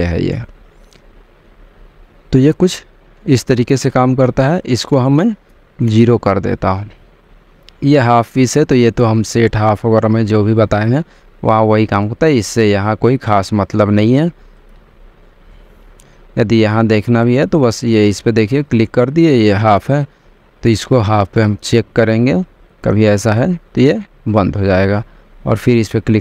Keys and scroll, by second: 6.0 0, 6.4 Return.